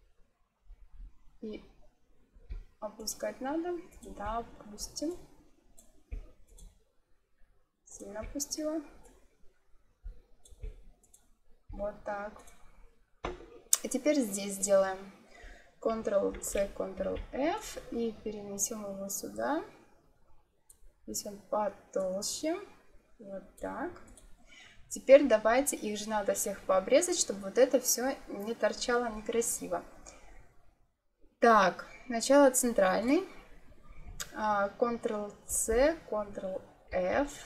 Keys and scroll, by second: 16.2 ctrl+c, 16.9 ctrl+f, 35.4 ctrl+c, 36.8 ctrl+f.